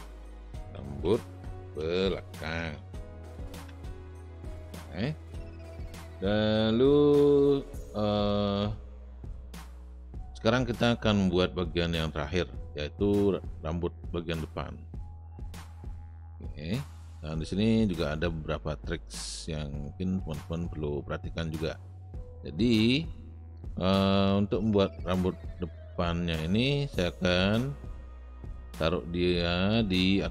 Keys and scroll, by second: 0.0-4.7 typing.